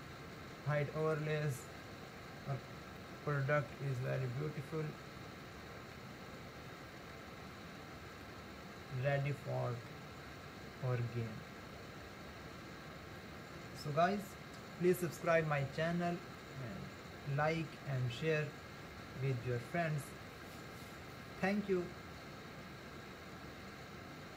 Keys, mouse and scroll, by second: 1.0 click, 3.0-6.1 shift+middle drag, 6.1-8.2 scroll up 2, 8.2-11.3 middle drag.